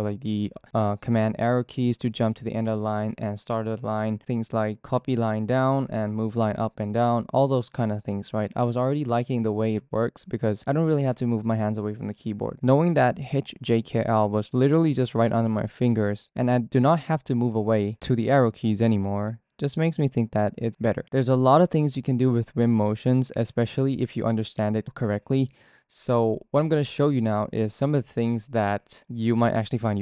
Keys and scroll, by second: 0.0 Down, 0.2 Down, 0.4 Down, 1.1 Down, 3.2 alt+shift+Down, 4.7 super+z, 5.2 Up, 5.4 Up, 6.1 Up, 6.2 Up, 6.4 Up, 6.8 Up, 7.3 super+Right, 8.4 alt+Left, 8.7 alt+Left, 9.2 alt+Right, 10.2 Down, 10.4 Down, 10.7 Left, 10.9 Left, 11.0 Left, 11.2 Left, 11.4 Left, 11.9 alt+Left, 13.0 alt+shift+Down, 13.5 Up, 13.8 Down.